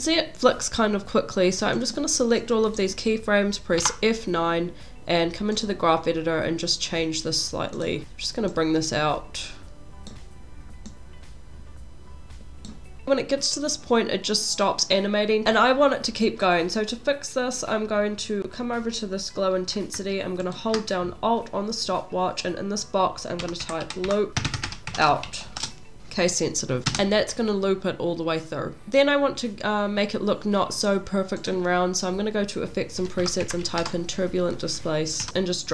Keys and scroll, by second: 3.8 F9, 13.0 space, 26.9 space, 35.3 BackSpace.